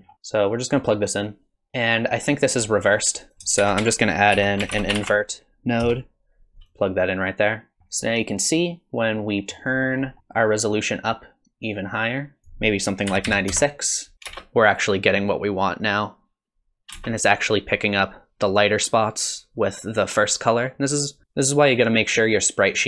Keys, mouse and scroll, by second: 0.0 scroll down 5, 0.1 middle click, 0.5 click, 1.5 middle click, 1.5 scroll down 1, 2.7 middle click, 3.2 click, 3.6 shift+a, 7.8 middle click, 7.8 scroll down 3, 7.8 middle click, 10.0 middle click, 10.2 click, 14.2 click, 14.3 space, 17.0 space.